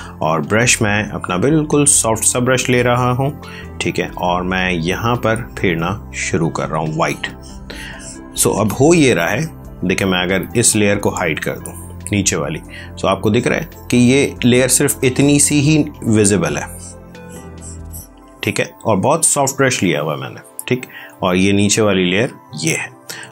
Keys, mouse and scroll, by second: 1.6 click, 10.3 click, 13.1 click, 21.1 click, 22.8 ctrl+space.